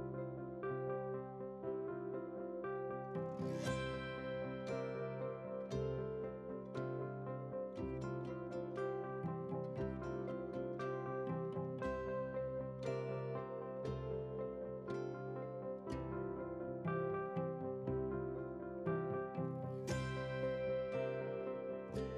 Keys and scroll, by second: 0.3 ctrl+v.